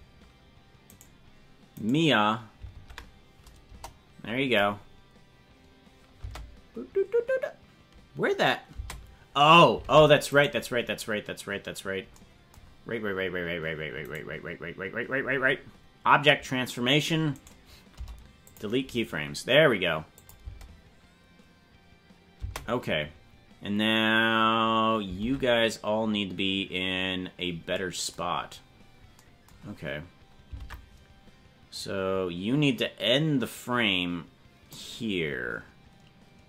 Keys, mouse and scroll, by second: 0.9 right click, 1.8 right click, 2.7 Tab, 3.7 KP_0, 4.7-5.1 scroll up 4, 6.2 space, 8.8 space, 9.8 ctrl+Tab, 10.3 right click, 14.1 right click, 17.3 right click, 17.9 Delete, 20.2 click, 20.5 space, 22.4 space, 25.2 ctrl+Tab, 28.4-28.8 scroll down 5, 30.6 ctrl+Tab, 31.8-34.8 drag.